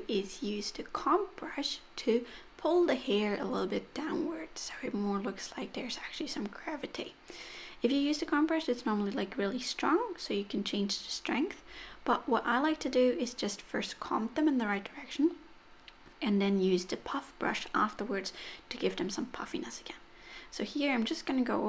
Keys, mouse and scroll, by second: 0.0 click, 0.3 click, 0.5 click, 0.7 click, 1.1 click, 1.4 click, 1.6 click, 1.8 click, 2.1 click, 2.4 middle click, 3.0 click, 3.3 click, 3.8 f, 4.9 click, 5.1 click, 5.3 click, 5.7 click, 6.0 click, 6.2 click, 6.5 click, 6.7 click, 7.0 click, 7.2 middle click, 7.7 click, 8.0 click, 8.2 click, 8.5 click, 8.7 middle click, 9.0 click, 9.3 click, 9.6 click, 9.8 middle click, 10.3 click, 10.5 click, 12.3 click, 13.1 f, 13.5-13.9 click, 13.6 click, 13.7 click, 14.1 click, 14.2 click, 14.4 click, 14.7 click, 14.8 click, 15.1 click, 15.3 click, 15.5 click, 16.0 click, 16.2 click, 16.4 click, 16.5 click, 16.7 click, 16.9 click, 17.1 click, 17.3 click, 17.5 click, 17.7 click, 17.9 click, 18.2 click, 18.4 click, 18.7 click, 19.0 click, 19.2 click, 19.4 click, 19.6 click, 19.8 click, 20.0 click, 20.1 click, 20.3 click, 20.5 middle click, 20.7 click, 20.9 click, 21.1 click, 21.2 click, 21.5 click.